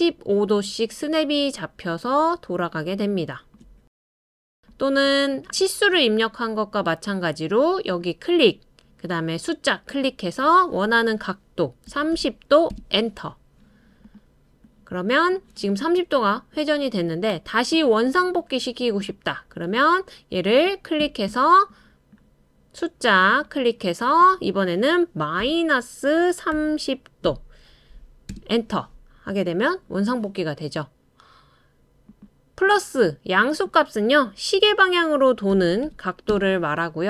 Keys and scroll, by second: 11.9-12.7 typing, 25.4 typing, 26.5-27.2 typing, 28.3 typing, 35.5-36.3 typing.